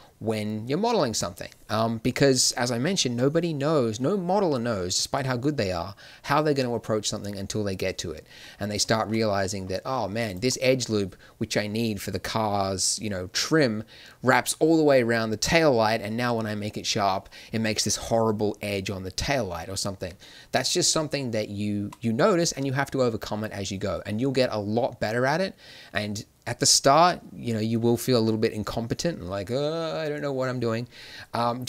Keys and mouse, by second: 10.2-12.2 right drag, 17.0-21.8 middle drag, 21.8 a.